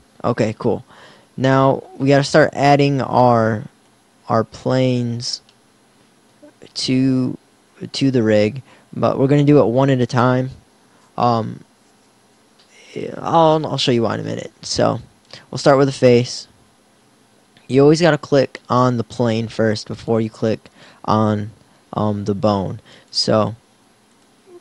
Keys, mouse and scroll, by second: 1.2 Tab, 4.7 KP_1, 16.1 KP_1.